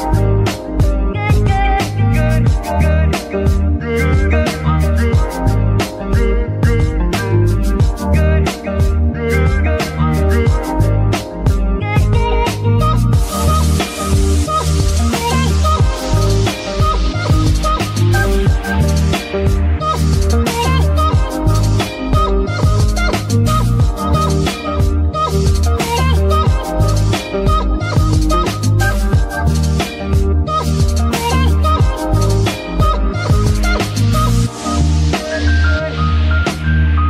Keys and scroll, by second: 4.2 shift+z, 11.6 ctrl+c, 14.8 ctrl+v, 18.5 g, 20.6 Escape, 26.2-27.8 typing, 30.6 ctrl+v, 33.9 g, 33.9 f, 35.8 Escape, 36.9 KP_3.